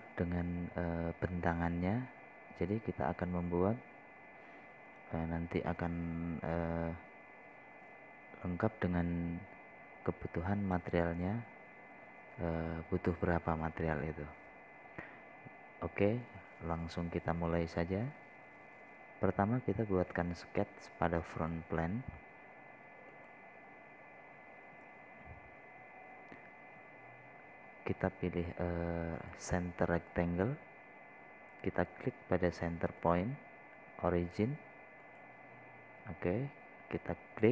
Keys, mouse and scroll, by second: 22.7 click, 26.0 scroll up 1, 26.7-27.4 scroll down 1, 30.6 click.